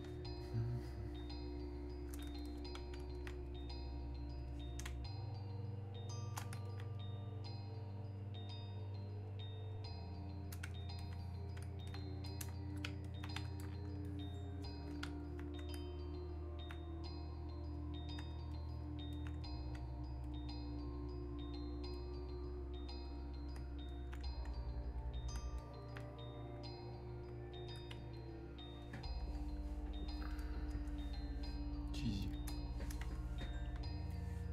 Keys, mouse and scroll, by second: 0.9-2.4 drag, 4.9 space, 5.5 click, 5.6 space, 6.6-13.0 alt+drag, 14.1 ctrl+click, 15.2-17.7 alt+drag, 25.0-34.5 drag.